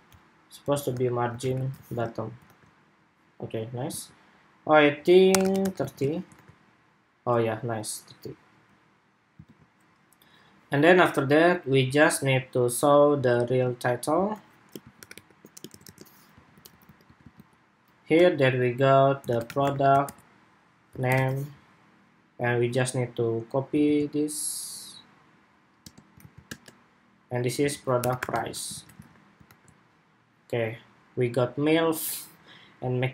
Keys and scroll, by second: 1.6 super+s, 1.8 super+Tab, 2.2 super+r, 3.7 super+Tab, 5.9 super+Tab, 6.1 super+r, 9.1 super+Tab, 23.5 super+c, 25.9 super+v, 28.9 super+Tab, 29.1 super+r.